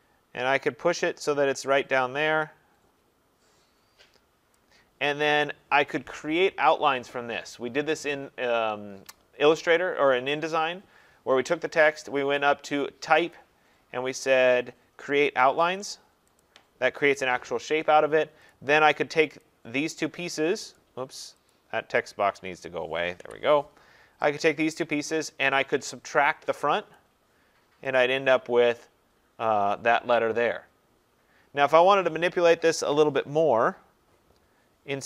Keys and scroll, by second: 23.1 Delete, 32.8 ctrl+z.